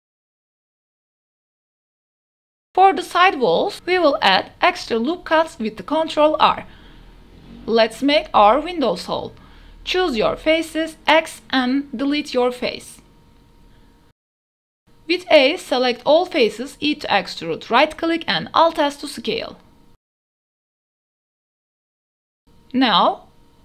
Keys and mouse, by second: 0.1 3, 0.4 g, 0.4 z, 1.4-1.8 drag, 1.8 Tab, 1.9 drag, 1.9 e, 2.4 Tab, 2.5 click, 4.0 ctrl+r, 7.0 ctrl+r, 8.1 click, 8.5 ctrl+r, 9.1 click, 9.3 ctrl+r, 10.1 click, 10.4 KP_0, 11.2 3, 11.4-11.7 drag, 12.4 x, 14.3 KP_0, 14.6 3, 16.3 a, 16.6 click, 17.3 e, 18.0 alt+s.